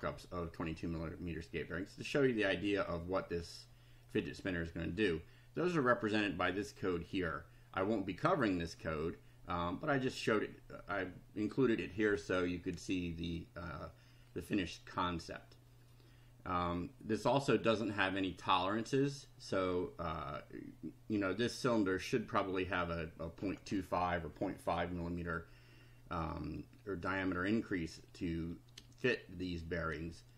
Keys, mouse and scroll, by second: 1.6-4.2 middle drag.